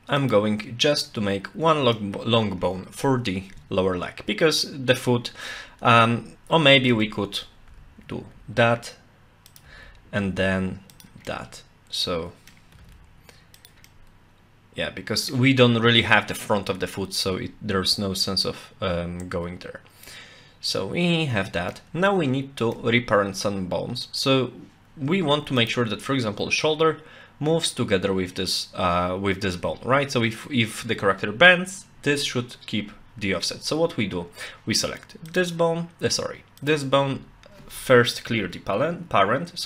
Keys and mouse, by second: 0.2 click, 1.1 middle click, 6.8 ctrl+z, 7.7 e, 8.3 z, 9.5 click, 9.6 e, 10.2 z, 10.9 click, 11.3-12.5 middle drag, 12.7 g, 13.9-15.3 middle drag, 20.1-21.7 middle drag, 22.1 shift+middle click, 25.6 click, 35.3 click, 36.6 click.